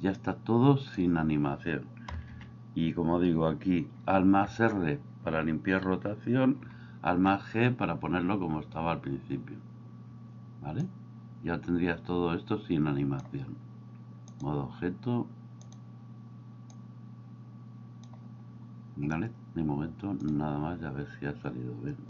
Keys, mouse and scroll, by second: 0.2 click, 2.0 a, 2.3 a, 4.4 alt+r, 6.8 alt+g, 10.8-13.2 drag, 14.4-15.8 drag, 16.8-18.0 drag.